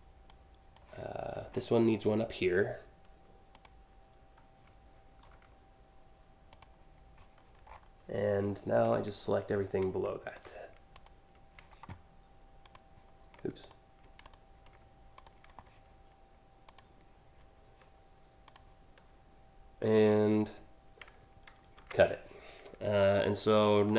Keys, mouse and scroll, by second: 1.1 alt+scroll up 1, 3.1 click, 6.2 click, 7.3 scroll down 1, 8.1-8.4 scroll up 2, 8.8 alt+scroll up 1, 10.5 click, 12.3 ctrl+click, 13.3 click, 13.9 ctrl+click, 14.8 click, 16.3 shift+click, 18.0 shift+click, 21.4 ctrl+x, 22.8 scroll up 1, 23.2 scroll down 1, 23.4-23.9 scroll up 1.